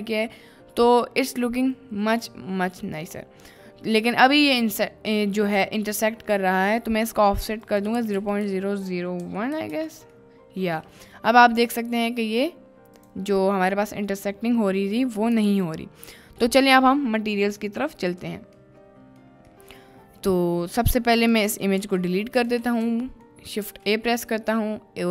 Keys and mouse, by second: 3.2-3.6 middle drag, 4.0 middle drag, 5.2 middle drag, 7.6-9.8 drag, 8.4 0, 10.3-11.2 middle drag, 11.5 middle drag, 13.0 click, 14.1 middle click, 15.5 ctrl+s, 15.9 middle click, 16.5 middle click, 18.7-19.2 middle drag, 19.6 middle click, 21.2 click, 21.7 Delete, 22.4 click, 23.1 shift+middle drag, 23.6 shift+a.